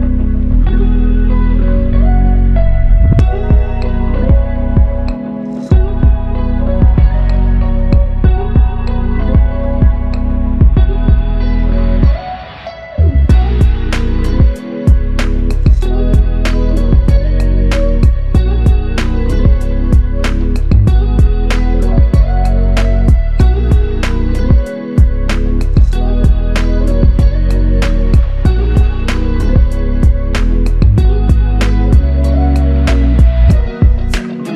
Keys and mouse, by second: 4.6 ctrl+click, 5.4 ctrl+click, 13.5 double click, 18.9 alt+click, 29.9 w.